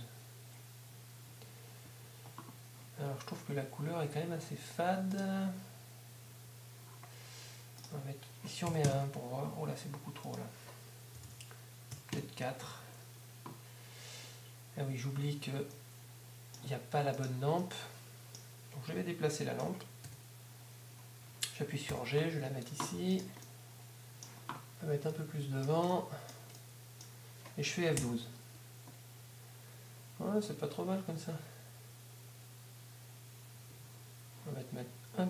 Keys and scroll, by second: 1.3 Escape, 11.3 shift+., 21.9 g, 22.4 g, 28.0 F12.